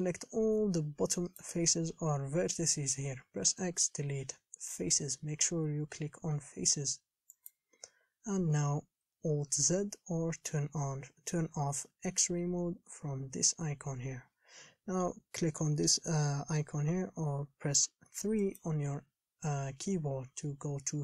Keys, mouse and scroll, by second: 9.7 alt+z, 18.6-21.0 drag.